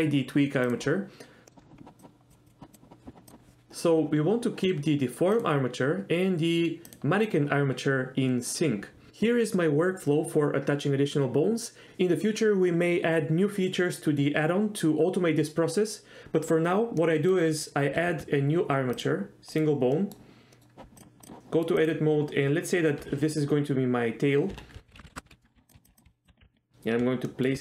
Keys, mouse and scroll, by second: 0.8 click, 1.5 middle click, 2.0 click, 2.7 click, 5.5 click, 17.2 middle click, 18.1 shift+a, 20.1 middle drag, 20.6 middle click, 21.0 drag, 21.5 middle click, 24.7 F2, 25.3-26.4 typing, 27.4 shift+middle click.